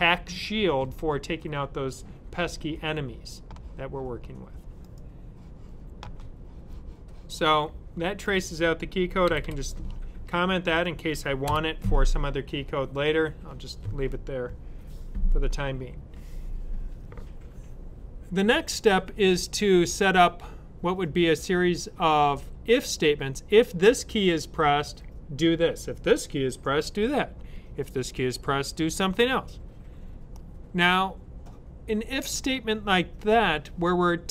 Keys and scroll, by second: 9.1 typing, 10.8 typing.